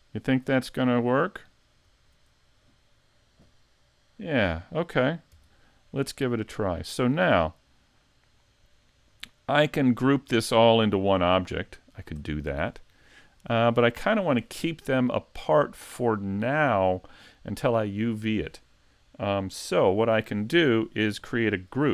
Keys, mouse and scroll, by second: 5.8 scroll down 1, 6.2-6.7 scroll up 2, 6.7 middle click, 8.3 click, 8.8-9.2 scroll up 2, 9.7 middle click, 10.4 shift+middle click, 11.0-11.3 scroll down 1, 11.3 shift+middle click, 11.8 middle click, 12.4 shift+middle click.